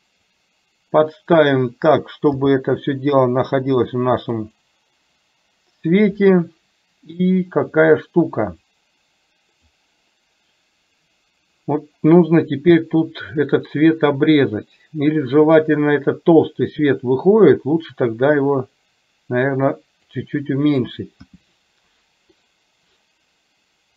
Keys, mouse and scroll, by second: 2.4 g, 8.7 click, 9.0 click, 18.0-20.2 drag, 21.3 g.